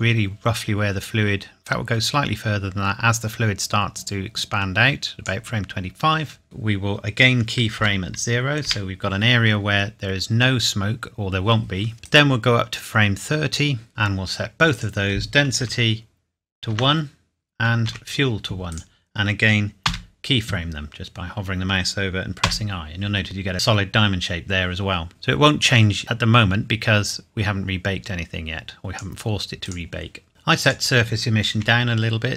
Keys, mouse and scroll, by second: 1.6 click, 7.7 i, 8.6 i, 12.0 click, 14.7 click, 15.6 KP_1, 16.7 Tab, 17.8 KP_1, 18.7 click, 19.8 i, 22.4 i, 25.1 click, 30.6 click, 31.5 KP_1.